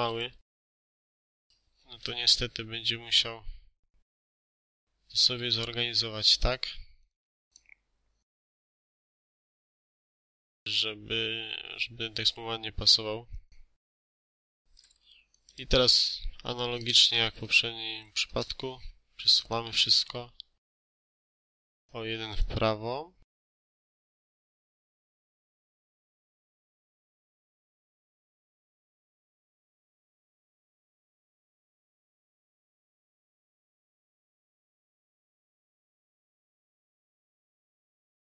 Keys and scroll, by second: 0.1 1, 0.5 8, 0.7 Return, 5.2 Escape, 15.5 ctrl+a, 16.9 BackSpace, 17.9 6, 18.2 Return, 19.5 Escape, 24.7 2, 24.9 3, 25.2 Return, 25.7 Escape, 28.5 2, 28.7 9, 29.1 Return, 29.6 Escape, 35.7 3, 35.8 0, 36.1 Return, 36.8 Escape.